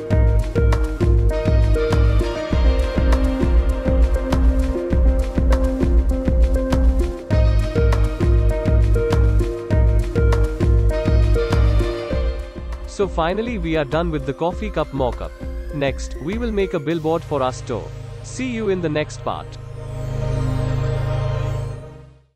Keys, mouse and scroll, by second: 1.8 click, 6.2 click, 10.0 click, 12.4 click, 14.8 click.